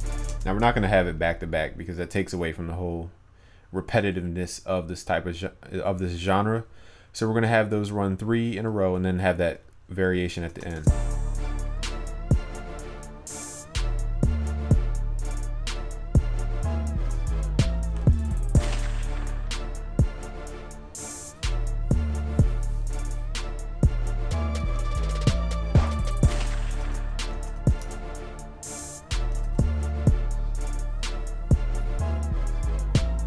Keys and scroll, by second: 10.5 ctrl+s, 29.5 ctrl+s.